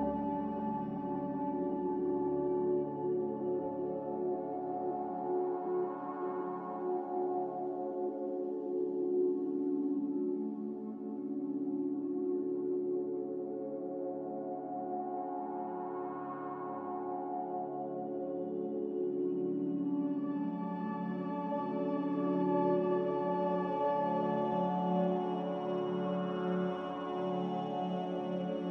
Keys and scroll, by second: 0.3 g, 4.9 z, 18.2 ctrl+z, 24.1 b, 28.4 Delete.